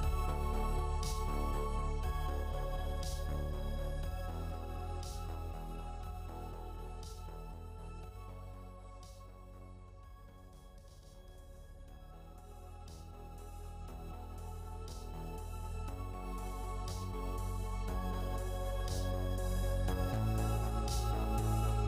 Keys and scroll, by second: 8.7 3, 9.1 2, 18.3 3, 18.7 1.